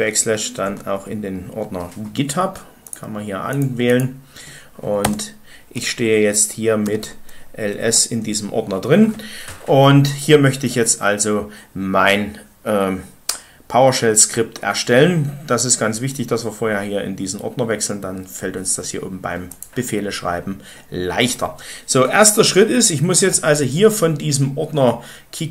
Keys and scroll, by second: 0.3-1.1 typing, 5.0 Return, 6.5-7.3 typing, 7.8 Return.